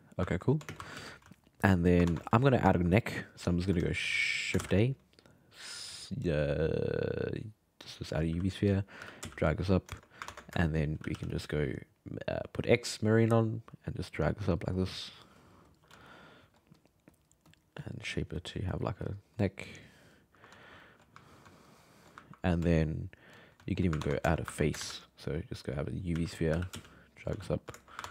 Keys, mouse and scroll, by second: 0.7 shift+space, 0.9 f, 1.3 alt+middle click, 1.6 alt+middle click, 2.0 ctrl+Tab, 2.5-3.3 middle drag, 4.2 alt+middle click, 4.6 shift+a, 8.3 s, 9.0 g, 10.3 ctrl+Tab, 10.6 shift+middle click, 11.0 g, 11.1 f, 12.6 click, 13.7-16.0 drag, 16.0 alt+middle click, 16.8-20.6 drag, 20.6 alt+middle click, 21.3 ctrl+middle click, 22.7 shift+middle click, 24.0 ctrl+Tab, 24.3-24.8 ctrl+shift+middle drag, 24.8 shift+a, 26.1 s, 26.5 g, 27.4 alt+middle click, 27.8 shift+middle drag, 28.0 ctrl+Tab.